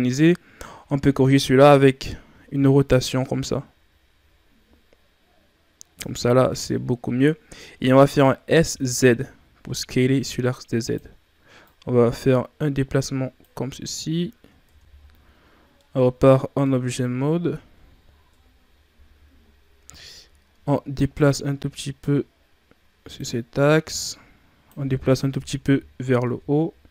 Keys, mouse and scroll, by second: 6.6-7.7 scroll down 2, 7.7-8.0 scroll up 1, 8.4 s, 11.6-13.7 drag, 13.7 scroll down 1, 14.2-15.8 shift+scroll down 5, 14.7 Tab, 15.8-17.0 middle drag, 17.0-18.3 ctrl+scroll down 2, 18.3 KP_3, 19.4-19.8 scroll up 4, 19.8 Tab, 20.9-25.3 drag, 25.3 KP_1, 26.2 Tab, 26.5-26.9 scroll down 2.